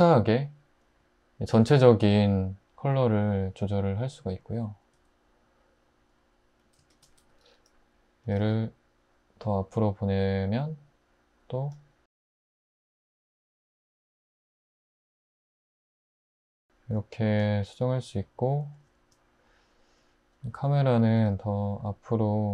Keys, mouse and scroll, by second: 4.9 `, 7.2 `, 8.2 typing, 12.2-13.0 typing, 21.2 typing.